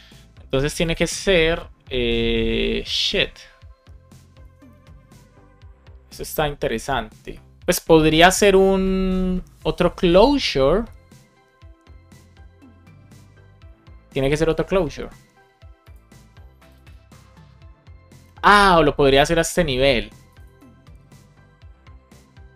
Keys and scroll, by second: 8.1 Right.